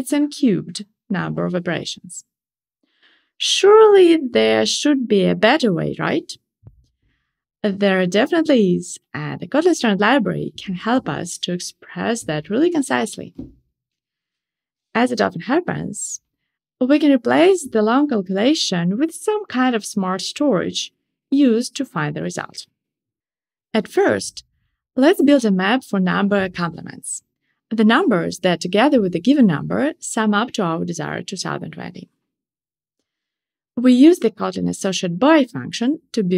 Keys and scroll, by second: 31.2 Return, 36.1 shift+super+Return.